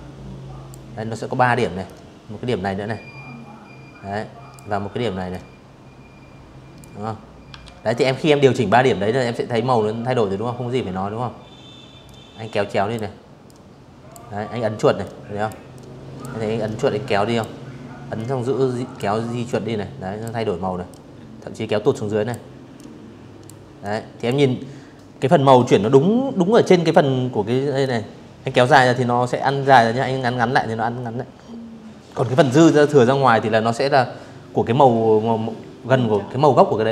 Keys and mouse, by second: 3.0-4.4 drag, 5.3 ctrl+z, 9.7 click, 11.1 click, 12.7 click, 13.4 click, 14.3 click, 15.8 click, 17.1 click, 18.6-20.0 drag, 20.4 click, 21.5 click, 25.5-35.7 drag, 36.5 click.